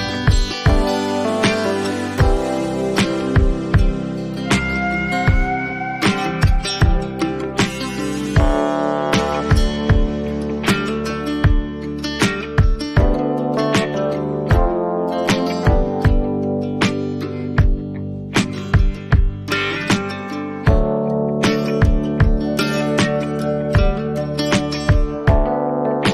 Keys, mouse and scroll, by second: 4.4 ctrl+t, 4.4 right click, 4.4 click, 7.9 click, 9.4 click, 12.4 click, 13.1 ctrl+t, 17.2 click, 17.8 ctrl+z, 18.7 click, 21.4 click, 22.0 Return, 24.4 ctrl+j.